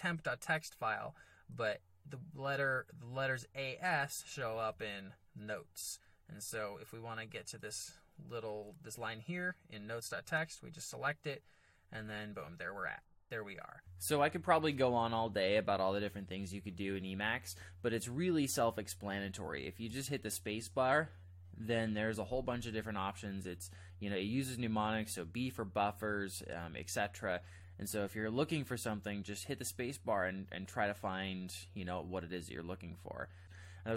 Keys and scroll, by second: 4.3 ctrl+j, 4.5 ctrl+j, 4.7 ctrl+j, 6.0 ctrl+j, 10.2 Return, 11.7-13.7 typing, 13.8 alt+Tab, 19.9 space.